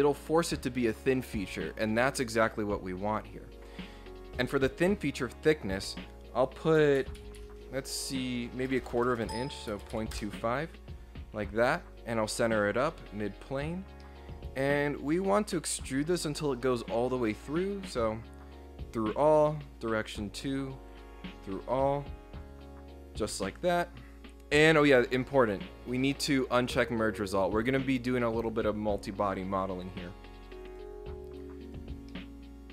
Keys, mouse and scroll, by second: 10.1 Return, 11.9 click, 12.8 click, 14.0-15.1 middle drag, 16.9 click, 17.9 click, 19.5 click, 20.5 click, 20.9 click, 29.6 click, 30.7 click, 31.7 click, 32.1-32.7 middle drag.